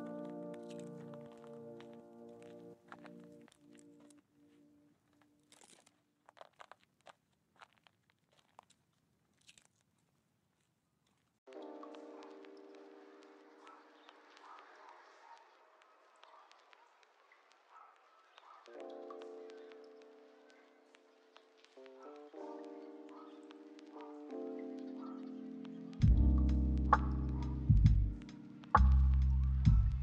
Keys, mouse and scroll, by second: 0.4 ctrl+click, 1.2 m, 2.4 ctrl+z, 3.0 m, 4.0 ctrl+z, 5.0 ctrl+click, 5.2 m, 6.8 ctrl+z, 7.1 m, 8.2 ctrl+click, 8.3 m, 9.0 ctrl+z, 9.8 ctrl+click, 9.9 m, 10.5 middle click, 12.0 ctrl+click, 12.1 ctrl+click, 13.1 ctrl+click, 13.2 ctrl+click, 13.6 middle click, 14.3 ctrl+click, 14.4 ctrl+click, 15.0 middle click, 15.6 ctrl+click, 15.7 ctrl+click, 16.6 ctrl+click, 16.7 ctrl+click, 17.0 middle click, 17.4 scroll down 1, 17.5 middle click, 18.1 scroll up 1, 18.4 middle click, 19.4 ctrl+click, 19.6 ctrl+click, 20.2 ctrl+click, 20.4 ctrl+click, 21.6 ctrl+click, 21.7 ctrl+click, 22.3 ctrl+click, 22.4 ctrl+click, 22.8 middle click, 24.3 ctrl+click, 24.4 ctrl+click, 25.0 ctrl+click, 25.5 middle click, 26.5 ctrl+click, 26.6 ctrl+click, 27.3 ctrl+click, 27.5 m, 27.9 middle click, 28.6 scroll down 1, 28.8 middle click, 29.8-30.0 scroll up 1.